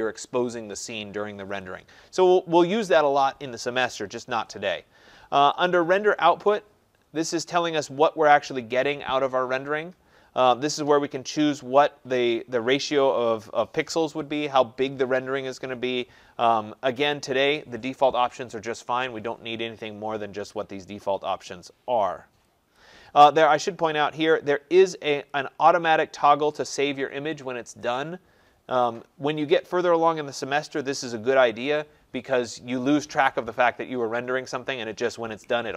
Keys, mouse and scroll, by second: 1.6 click, 5.7 click, 22.7 click, 23.4 click, 25.3 click.